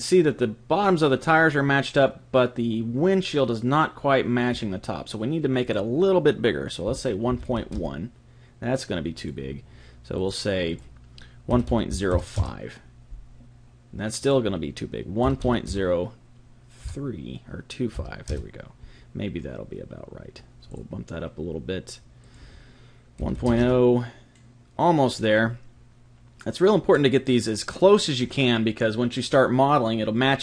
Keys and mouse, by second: 5.6 click, 9.2-12.5 drag, 14.2 click, 20.7-24.0 drag, 26.9-30.4 middle drag.